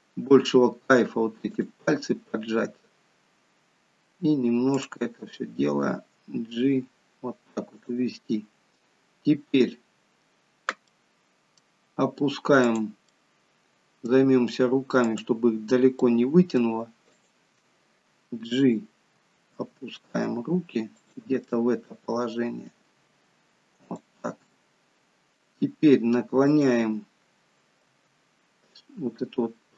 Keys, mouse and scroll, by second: 4.7 click, 5.1 g, 9.5 click, 10.9 middle click, 12.7 click, 13.1 middle click, 15.1 click, 16.0 middle click, 17.1 shift+click, 19.6 g, 21.5 middle click, 23.0 g, 24.5 middle click, 26.5 click, 27.9 r.